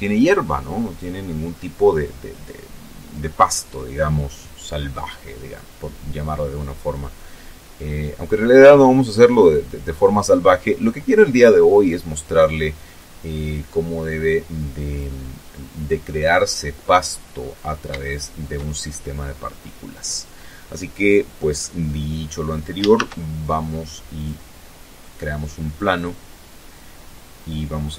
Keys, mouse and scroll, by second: 8.1 click, 11.7-13.9 drag, 14.6 scroll down 2, 15.1 middle click, 15.8 scroll down 2, 16.2-16.5 scroll up 1, 16.7-18.0 shift+middle drag, 20.3 middle click, 21.6 shift+a, 22.9 click, 27.8 r.